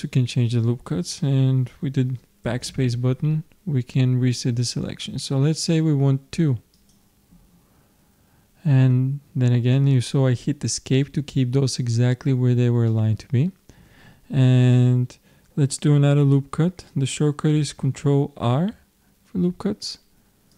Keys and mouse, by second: 12.9-18.5 middle drag, 18.5 ctrl+r.